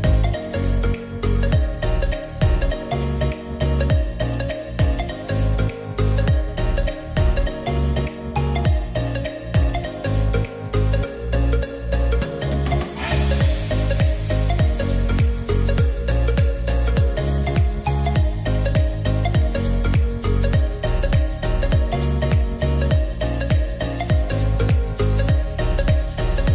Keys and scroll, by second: 22.9 r.